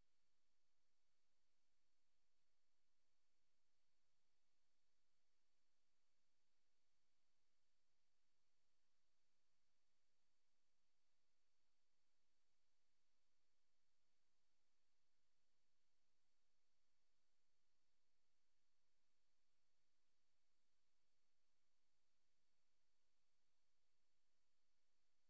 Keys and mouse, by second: 0.0 click, 1.2 click, 1.8 click, 2.9 a, 4.0 g, 4.4 x, 6.1 click, 7.1 typing, 8.3 click, 10.2 r, 12.5 click, 13.7 typing, 15.6 click, 16.4 typing, 17.1 click, 18.6 click, 19.5 click, 20.6 click, 22.6 click, 23.1 click, 23.4 click.